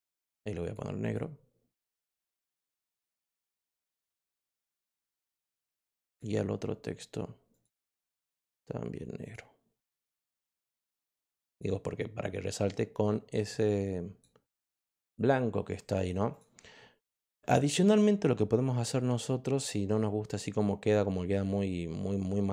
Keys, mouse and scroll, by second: 0.0 click, 0.5 click, 1.0 click, 1.9 click, 2.9 click, 3.3 click, 5.4 click, 6.0 click, 7.4 click, 9.1 click, 11.0 click, 11.4 click, 13.3 click, 14.5 click, 15.9 click, 16.2 click.